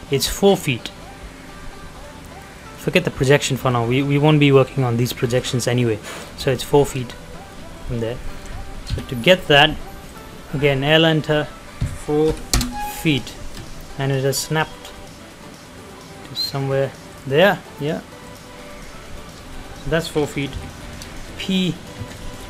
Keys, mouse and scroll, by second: 2.5 middle click, 2.8-3.2 scroll up 1, 3.2-3.7 scroll down 1, 3.7 middle click, 6.4 click, 7.7 middle click, 7.9 scroll down 1, 8.2 middle click, 8.8 l, 9.1-10.1 scroll up 1, 10.1 click, 12.3 ', 12.6 Return, 12.9 scroll down 1, 13.3 shift+middle click, 13.6-14.2 shift+scroll up 1, 17.1 click, 18.7 middle click, 19.5 scroll up 1, 20.5 p, 20.8 scroll down 1, 21.1 shift+middle click, 22.1 ctrl+click, 22.4 scroll down 1.